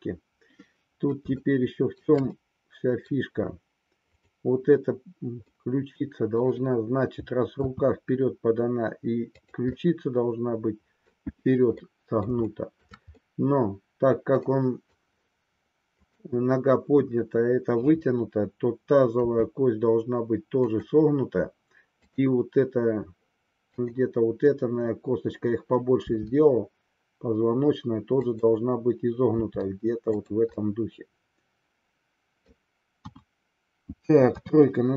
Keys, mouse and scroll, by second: 2.0 shift+scroll down 1, 2.3 scroll up 1, 2.4-3.2 middle drag, 4.2-5.5 drag, 5.5-6.6 middle drag, 7.7 r, 9.8-11.0 middle drag, 11.8-12.3 middle drag, 12.5 shift+middle click, 13.1-15.0 middle drag, 16.0-17.4 drag, 19.3 r, 22.0-23.3 drag, 23.9-25.4 drag, 26.2 r, 29.3 r, 30.3 click, 30.5-32.7 middle drag, 33.0 KP_1, 34.3 KP_3.